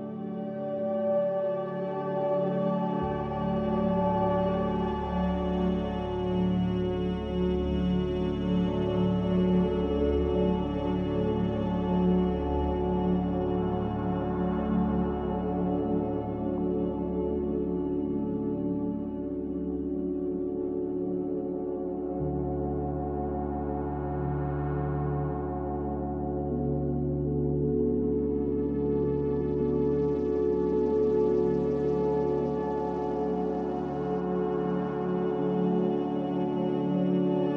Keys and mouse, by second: 1.8-3.1 shift+middle drag, 5.5 click, 9.3 shift+drag, 9.5-9.8 shift+middle drag, 10.5 click, 11.8 s, 15.6 click, 17.1 g, 19.3 Tab, 24.3 click, 27.9 Tab, 28.5 Tab, 29.6 Tab, 33.0 Tab, 33.5 alt+z, 35.8 alt+z, 36.4 Tab.